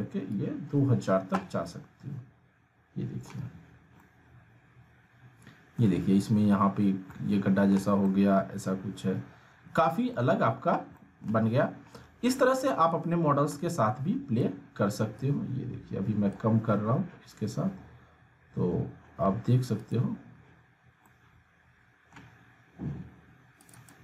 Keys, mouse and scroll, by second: 0.3-1.2 drag, 1.6-3.5 alt+middle drag, 4.0-5.9 alt+middle drag, 6.7 scroll up 1, 7.1-7.7 alt+middle click, 7.5-8.0 alt+scroll down 2, 8.1-9.0 alt+middle drag, 10.1-10.8 alt+middle click, 10.8 scroll down 1, 10.9 alt+middle click, 11.5 scroll up 1, 12.9-14.5 drag, 17.2-18.0 scroll down 1, 19.9 scroll down 1, 20.0 click, 20.3 click, 21.3-22.3 middle drag, 22.8-23.9 scroll up 1, 23.9 click.